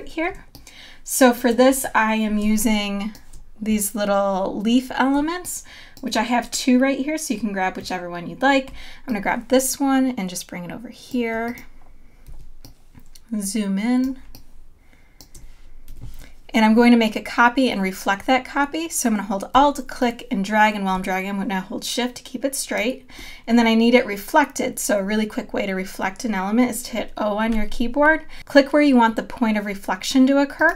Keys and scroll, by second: 2.7 space, 12.3 z, 14.0 space, 15.9 v, 27.5 o.